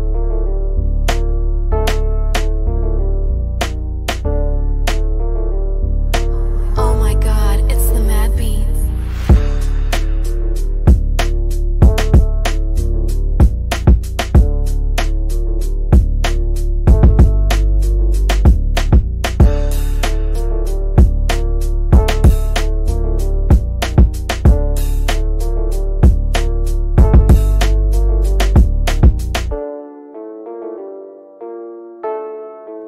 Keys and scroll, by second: 1.4 space, 15.5-17.6 typing, 19.2 F3, 30.6 Down, 31.5 shift+Home, 32.4 d.